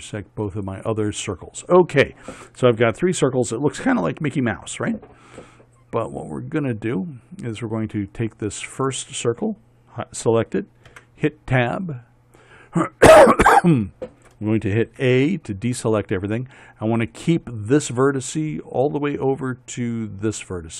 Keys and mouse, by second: 11.4 Tab, 15.4 a, 17.5-18.7 drag.